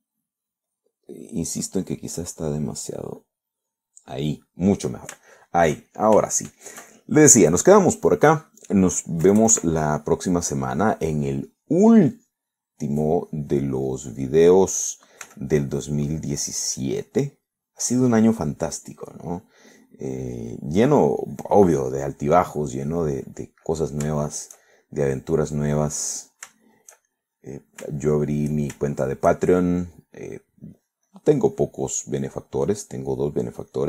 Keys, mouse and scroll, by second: 1.7 click, 3.1 click, 4.2 click, 4.7 click, 6.3 shift+middle click, 7.0 shift+middle click, 8.8 middle click, 9.5 middle click, 10.3 KP_Add, 11.5-13.6 drag, 14.0-15.5 drag, 16.3 f, 16.7 click, 17.1 click, 18.3 middle click, 18.9 middle click, 19.5 click, 20.4 middle click, 21.3 click, 21.8 middle click, 22.3 click, 24.3 middle click, 25.2 shift+middle click, 26.1 click, 27.0 middle click, 27.6 shift+middle click, 28.2 shift+middle click, 29.1 shift+middle click, 29.7 shift+scroll up 2, 29.9 shift+middle click, 30.6 shift+middle click, 31.9 click, 32.5 click, 33.3 scroll up 2, 33.3 middle click.